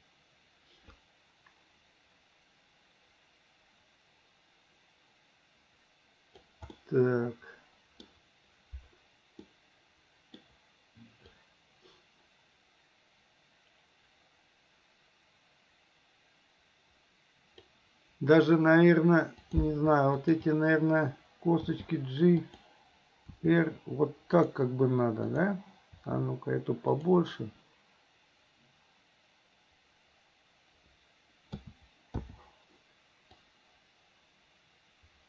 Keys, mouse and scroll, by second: 6.8-8.1 middle drag, 9.5 middle click, 11.4-17.8 drag, 19.5 click, 20.3 shift+click, 21.8 g, 23.3 r, 25.3 click, 26.0 r, 31.6 a, 32.2 i, 33.5-35.2 drag.